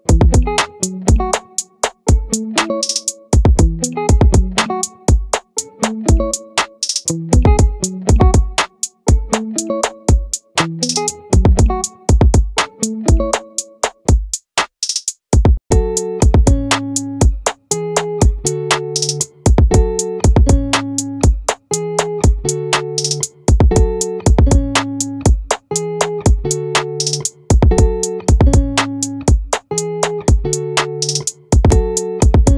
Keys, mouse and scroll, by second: 6.1-10.9 drag, 18.7-23.4 drag, 29.2-30.2 drag, 30.2-31.6 right drag, 31.6-32.5 drag.